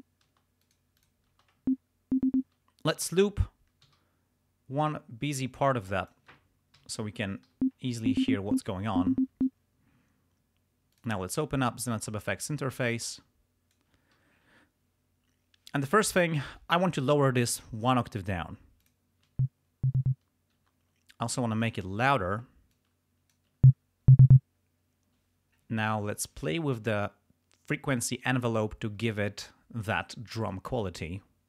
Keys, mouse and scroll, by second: 0.3 space, 0.7 click, 1.0 click, 1.4 space, 2.4 space, 3.8 r, 5.4 click, 6.8 ], 7.4 l, 9.3 space, 10.9 click, 12.4-13.9 drag, 15.6 click, 17.5 click, 18.8 click, 19.3 space, 20.6 space, 21.6 click, 22.7 click, 23.5 space, 24.3 space, 26.4 click, 30.4 click.